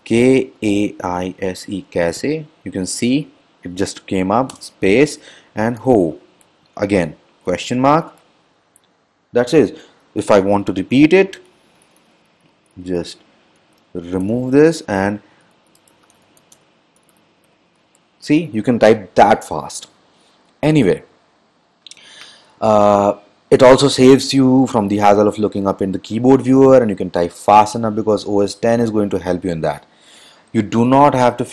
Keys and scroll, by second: 0.1-2.4 typing, 5.7-6.6 typing, 14.4-17.8 typing.